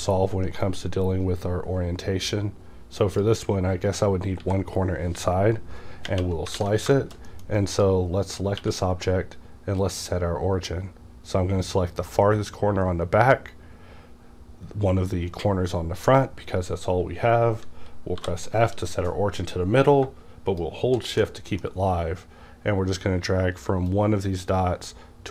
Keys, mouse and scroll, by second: 0.9-4.4 drag, 4.4 x, 6.5 x, 6.5 alt+a, 6.9 shift+middle click, 7.7 click, 8.6 q, 9.8 click, 11.7-21.2 drag, 18.2 f, 21.2-25.3 middle drag, 23.9-25.3 drag.